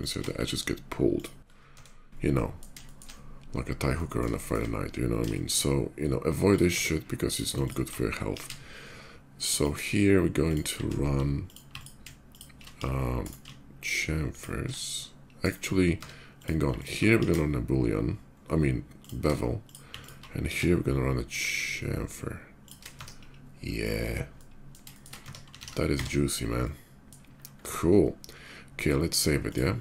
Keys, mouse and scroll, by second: 0.9 click, 0.9 x, 1.2 middle click, 1.4 Tab, 1.8 middle click, 2.0 middle click, 2.6 shift+middle drag, 3.0 shift+middle click, 3.7 shift+middle drag, 4.1 shift+middle drag, 4.4 shift+middle drag, 5.0 shift+middle drag, 5.8 shift+middle click, 6.1 shift+click, 6.4 Tab, 6.9 click, 7.4 alt+click, 8.0 ctrl+b, 9.3 shift+click, 10.2 shift+click, 11.1 alt+shift+click, 11.5 alt+click, 12.0 alt+shift+click, 12.5 ctrl+b, 13.0 right click, 14.1 alt+shift+click, 15.1 alt+shift+right click, 15.6 Tab, 16.0 click, 16.5 alt+click, 16.9 ctrl+b, 17.9 middle click, 18.8 shift+click, 19.4 shift+click, 19.7 alt+click, 20.1 ctrl+b, 21.2 middle click, 22.4 click, 22.6 Tab, 22.9 middle click, 23.4 middle click, 23.7-24.5 middle drag, 24.7 shift+middle click, 25.0 Tab, 25.7 Tab, 25.7 alt+x, 26.0-26.8 middle drag, 29.1 click.